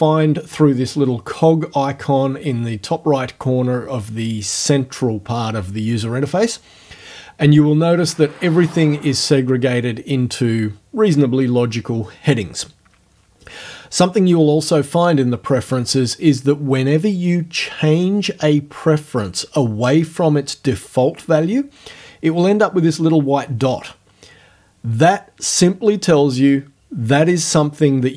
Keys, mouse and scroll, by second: 6.4 click, 26.5 click.